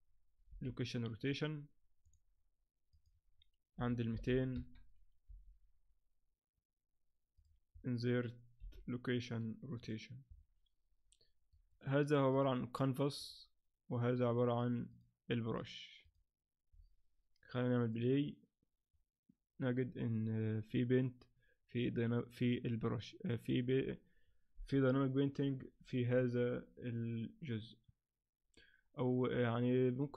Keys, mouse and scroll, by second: 0.5 i, 2.9 click, 4.3 0, 5.3 g, 8.6 i, 11.5 right click, 12.3 click, 13.2 click, 14.2 right click, 14.9 click, 15.5 click.